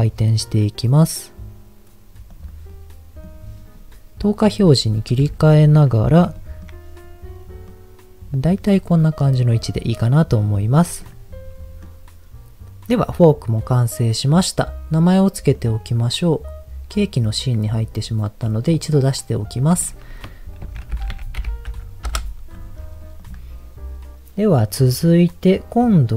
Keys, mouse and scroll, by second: 2.3 click, 2.7 middle click, 4.2 click, 5.2 KP_1, 6.5 shift+middle click, 7.7 middle click, 9.4 click, 9.8 middle click, 10.3-11.0 scroll down 3, 11.0 click, 11.8 middle click, 15.5 click, 16.9 click, 18.8 click, 19.5 click, 19.7-22.2 drag, 23.2 click.